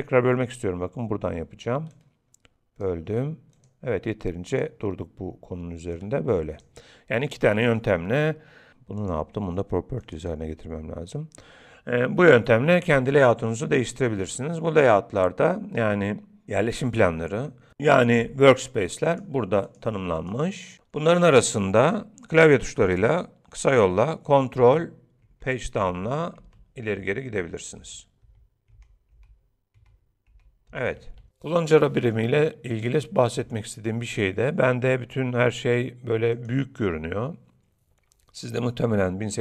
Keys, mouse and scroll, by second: 1.9 click, 3.6 click, 9.0 click, 28.3 ctrl+Page_Down, 28.3 ctrl+Page_Up, 36.4 click.